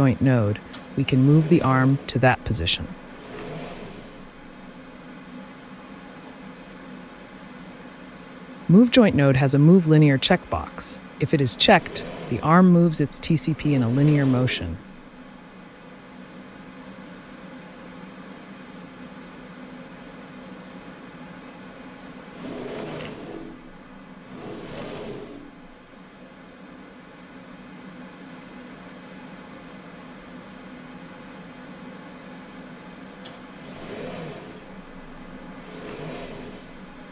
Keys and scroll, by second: 22.0 t.